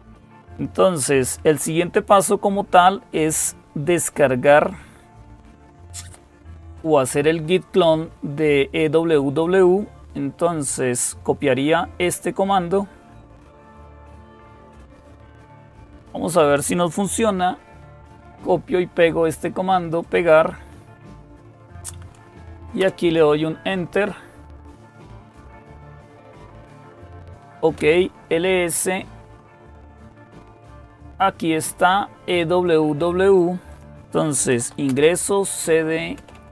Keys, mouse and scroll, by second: 5.2-6.0 scroll down 2, 13.0-19.0 drag, 19.0 right click, 19.8 click, 22.6 Return, 27.0-27.9 typing, 32.5-33.6 drag, 34.1-36.5 typing.